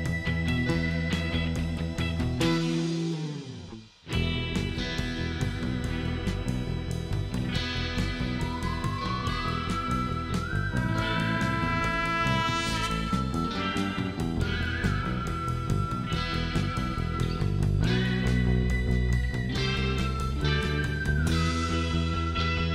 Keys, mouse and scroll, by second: 2.4 click, 3.1 click, 4.1 scroll down 1, 4.5 shift+right click, 6.2 click, 7.1 click, 7.9 middle click, 8.1-8.7 scroll up 2, 8.5 middle click, 10.1 click, 10.7 click, 11.1-12.2 middle drag, 13.8 scroll up 1, 14.8 click, 15.4 middle click, 16.6 click, 17.2 right click, 17.5 middle click, 18.8 click, 19.2 middle click, 21.6 click.